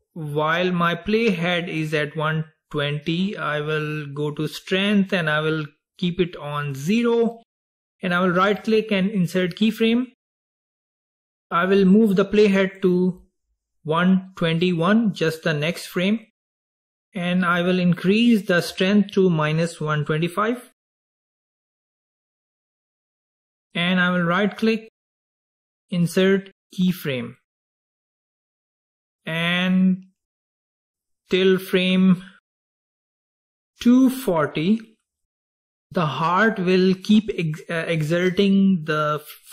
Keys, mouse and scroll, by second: 8.5 right click, 12.8-15.9 drag, 17.9-21.1 drag, 25.1 right click, 29.8-33.0 drag.